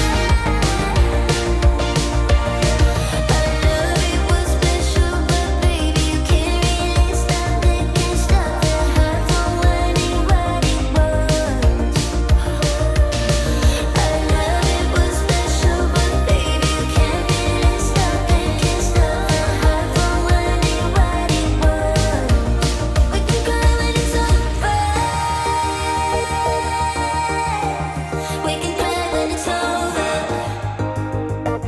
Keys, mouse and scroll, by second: 0.1 space, 2.7 click, 3.7 3, 3.9 Return, 5.4 click, 5.8 space, 8.4 space, 9.6 click, 10.5 Return, 11.0 Return, 12.1 click, 12.4 ctrl+d, 13.7 Return, 14.6 Return, 15.5-20.3 drag, 18.4 typing, 21.4-22.4 typing, 23.2 Return, 25.6 click, 26.3 click, 26.4-27.6 typing, 29.0 click, 29.2-31.6 drag.